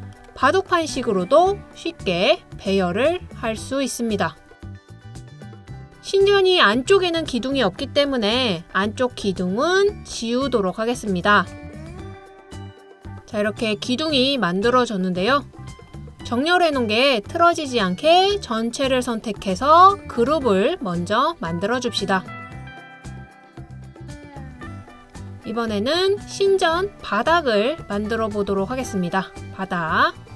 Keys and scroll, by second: 8.2-11.6 typing, 12.7-13.5 typing, 16.0 typing, 26.4 typing, 30.0 typing.